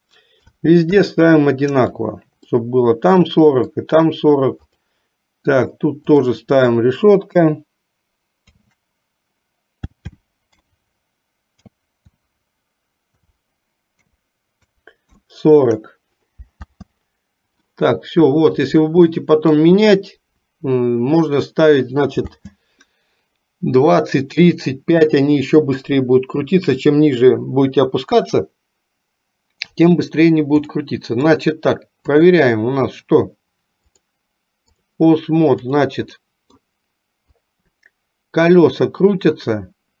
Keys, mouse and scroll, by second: 2.6-3.9 middle drag, 4.8 click, 6.2-15.4 drag, 16.7 space, 19.0 middle click, 22.5 space, 30.9 middle click, 32.4 click, 34.0 click, 36.2 middle click, 37.5-40.0 drag.